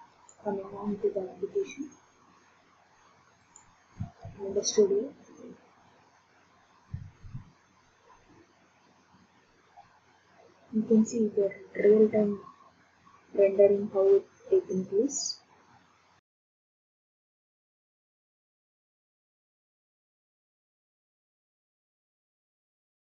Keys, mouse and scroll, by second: 0.3 click, 3.5 click.